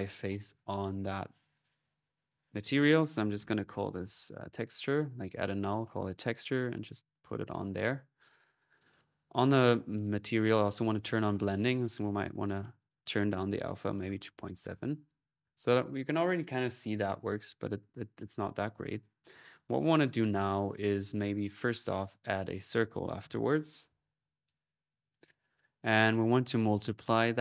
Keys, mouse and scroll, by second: 0.5 alt+n, 0.8-3.1 alt+drag, 5.1 click, 5.8 click, 8.6 click, 10.1-11.6 drag, 11.8 click, 12.6 click, 17.7-19.4 drag, 20.6 middle click, 20.6 typing, 21.3 click, 22.1 right click, 22.4 click, 23.2-23.9 typing, 24.3-25.5 drag, 25.1 Delete, 25.1 typing, 25.9 click, 26.3 click, 27.1 click.